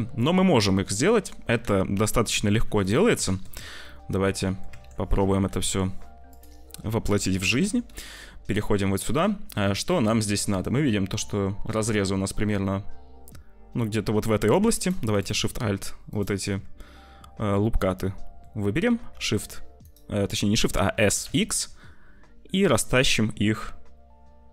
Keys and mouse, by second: 2.4 /, 3.1 Tab, 4.1 click, 4.6 Tab, 5.4 /, 7.0 /, 7.5 Tab, 8.2-10.0 drag, 14.3 2, 17.5 click, 18.9 s, 20.9 s.